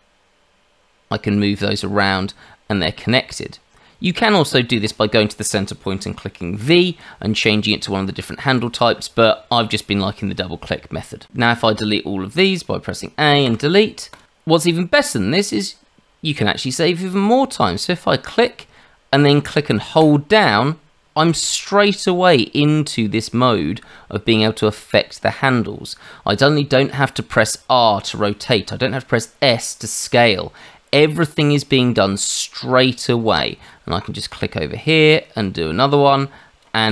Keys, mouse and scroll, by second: 4.8 click, 6.6 v, 8.4 Escape, 11.6 a, 13.4 Delete, 18.2 click, 20.0 click, 34.3 click.